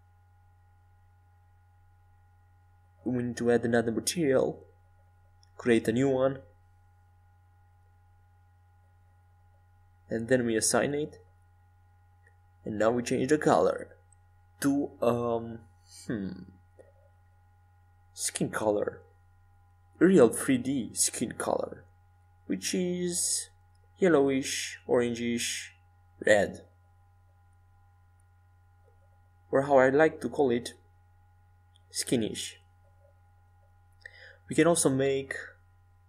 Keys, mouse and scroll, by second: 17.8-20.2 middle drag, 20.7-23.0 drag, 24.1-29.5 drag, 33.1-35.6 drag.